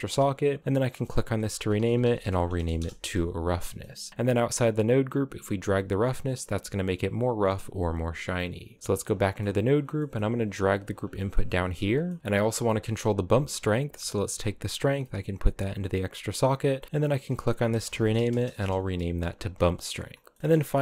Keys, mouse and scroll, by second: 0.6-2.3 drag, 2.3 s, 3.3 middle click, 3.5-4.0 scroll down 3, 4.0 Tab, 4.1-5.2 scroll up 3, 5.2-7.5 drag, 8.0 click, 8.6 Tab, 8.8 scroll down 9, 8.9 middle click, 9.3 right click, 9.5 scroll down 2, 9.7 middle click, 9.9 g, 10.8 middle click, 11.0 scroll up 6, 11.3 g, 11.8 middle click, 12.2 scroll up 3, 12.4-14.0 middle drag, 14.0 click, 16.1-19.2 drag, 19.2-20.0 scroll down 7, 19.4 middle click, 20.0 middle click, 20.4-20.8 scroll up 4.